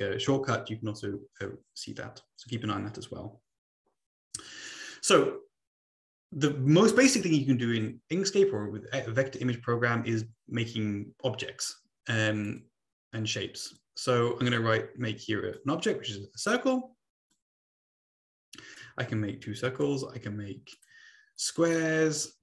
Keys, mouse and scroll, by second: 12.4-13.5 drag, 13.7-15.5 drag, 17.3-18.7 drag, 20.7 click, 21.3 click.